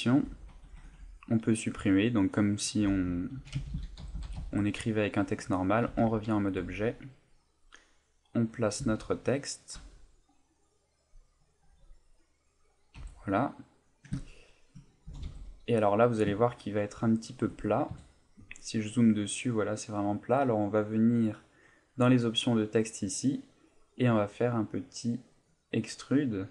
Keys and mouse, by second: 0.2 BackSpace, 0.5 BackSpace, 0.6 BackSpace, 3.4-4.4 typing, 5.9 Tab, 6.6 g, 8.5 click, 8.8 s, 9.7 click, 9.8 g, 11.3 click, 11.6 g, 12.6 click, 13.0 z, 13.3 middle click, 14.2 ctrl+middle click, 14.5 middle click, 15.1 g, 17.4 shift+click, 17.9 KP_Decimal, 18.6 middle click, 21.7 click, 25.5 click.